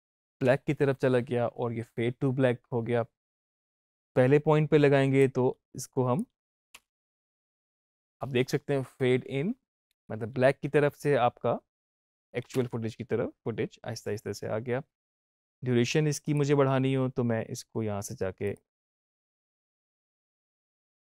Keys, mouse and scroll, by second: 3.5 Up, 5.1-6.7 drag, 6.7 space, 9.8 Up, 11.8 click, 12.4 space, 14.9 space, 16.2 click, 18.4 click.